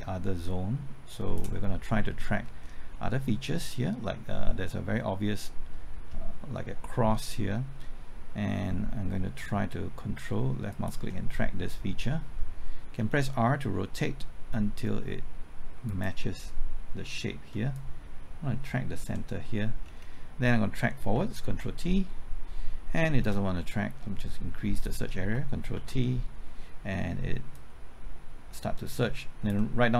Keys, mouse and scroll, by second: 2.1 middle click, 2.4-2.9 scroll up 1, 2.9 middle click, 3.3-6.0 scroll up 1, 10.7 ctrl+click, 13.0 r, 15.9-19.7 drag, 19.8-21.1 scroll down 1, 21.5 ctrl+t, 23.2 ctrl+z, 24.2 click, 25.7 ctrl+t, 27.5-29.7 drag.